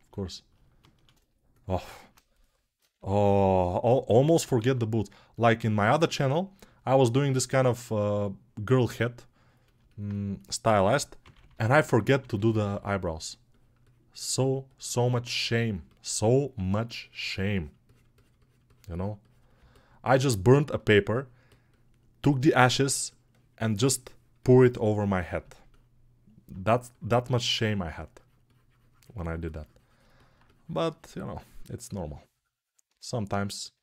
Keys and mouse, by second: 4.5 alt+q, 11.3 ].